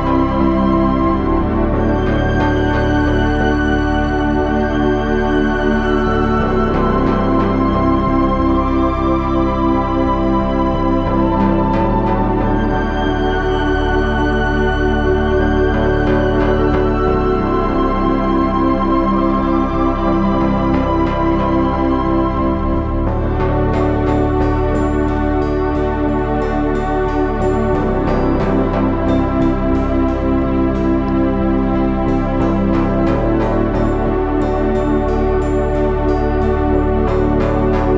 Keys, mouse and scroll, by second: 3.1 ctrl+z, 7.9 s, 9.4 e, 13.3 s, 14.2 e, 16.1 click, 16.1 s, 19.5 s, 21.7 e, 23.7 s, 26.6 e, 28.0 click, 28.3 s, 30.6 s, 32.9 e, 34.4 s.